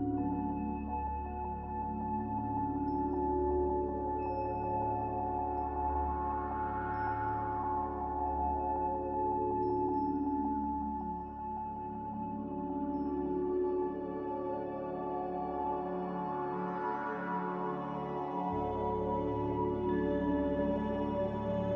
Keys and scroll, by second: 17.0 Delete.